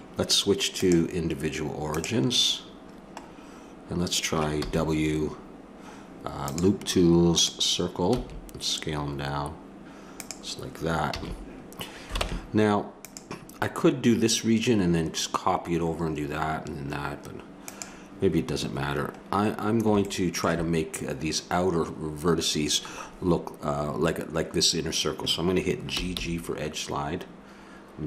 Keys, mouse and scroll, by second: 0.8 click, 4.6 w, 8.3 s, 11.1 a, 12.2 ctrl+Tab, 17.6-19.3 right drag, 19.3 middle click, 20.3-21.8 drag, 25.9 g.